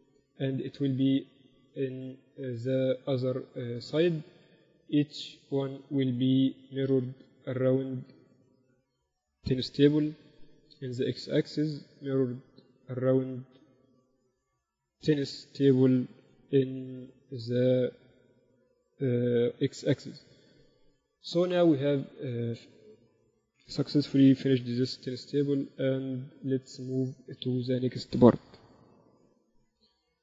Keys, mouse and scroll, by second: 4.9-6.7 right drag, 5.9-7.5 drag, 7.9-10.3 drag, 12.6-15.0 right drag, 13.5-15.3 drag, 15.9-17.7 drag, 17.9-19.6 middle drag, 19.6-20.1 KP_4, 20.3 KP_4, 21.0 ctrl+s, 22.7 KP_6, 22.9 KP_6, 24.6 KP_6, 24.7 KP_6, 25.9 z, 26.0 z, 26.5 z, 27.7-29.6 drag, 28.9 shift+c.